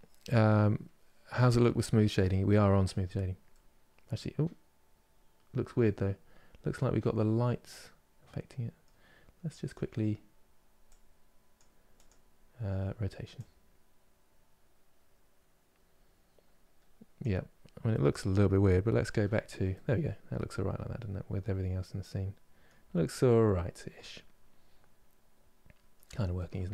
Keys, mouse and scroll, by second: 1.9 middle click, 2.7 scroll down 2, 3.2-6.2 middle drag, 7.3-9.3 middle drag, 9.3-13.1 drag, 17.2-17.6 scroll down 1, 17.6-18.7 middle drag, 18.7 KP_Divide, 19.5-22.4 middle drag, 22.5 scroll down 2, 22.9-25.7 middle drag, 25.7 KP_Divide, 26.0-26.7 middle drag.